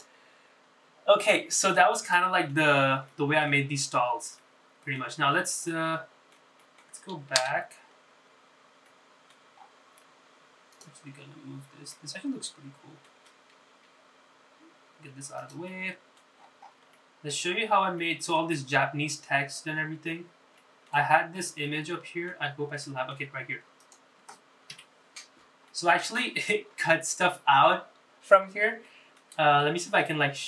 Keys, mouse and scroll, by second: 1.0 click, 1.5-2.3 scroll down 5, 2.3 middle click, 3.1 middle click, 3.9 scroll up 2, 4.2 shift+middle click, 5.0-5.5 scroll down 3, 5.5 middle click, 6.4 scroll up 2, 6.8 shift+middle click, 7.7 middle click, 8.7 KP_Divide, 9.3-9.8 scroll down 3, 10.0 middle click, 10.7-11.5 scroll up 5, 11.9 click, 12.2-12.7 scroll down 4, 13.1-14.2 middle drag, 14.9 g, 16.8 middle click, 17.5-17.9 scroll up 4, 18.1 shift+middle click, 18.7-19.1 scroll up 2, 19.1 middle click, 20.9-21.4 scroll down 4, 21.7 shift+middle click, 22.2-22.8 scroll down 3, 22.8 middle click, 23.6-24.0 scroll down 3, 24.0 shift+middle click, 24.9 click, 25.9 KP_Decimal, 26.8 middle click, 30.0 middle click.